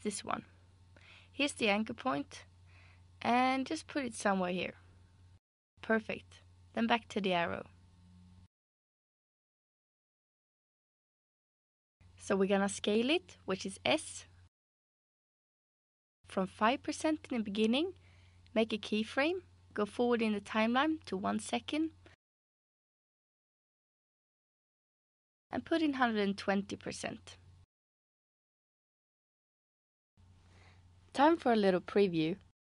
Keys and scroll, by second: 13.6 s, 16.6 5, 17.1 Return, 25.4-26.5 typing, 26.9 Return.